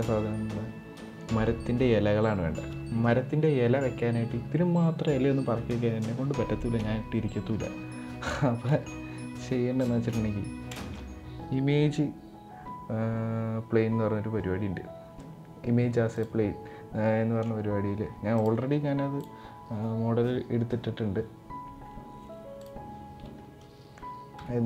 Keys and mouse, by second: 6.5 KP_7, 8.2 shift+middle click, 9.5 shift+middle click, 10.5 shift+a, 24.0 g.